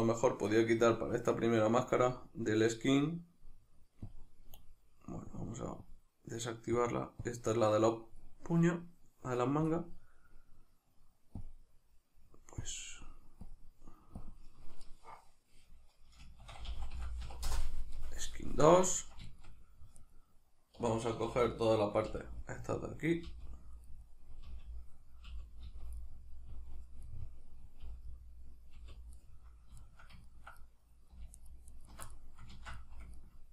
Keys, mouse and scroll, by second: 4.0-11.3 drag, 11.4-19.0 drag, 17.5 Return, 18.5 Tab, 19.0-20.0 ctrl+shift+middle drag, 20.0 right click, 20.8 3, 22.1 l, 23.9-31.4 middle drag, 24.5 l, 26.5 l, 27.9 l, 28.8 l, 31.4 alt+shift+right click, 31.7 alt+shift+right click, 32.1-33.5 middle drag, 32.5 ctrl+z.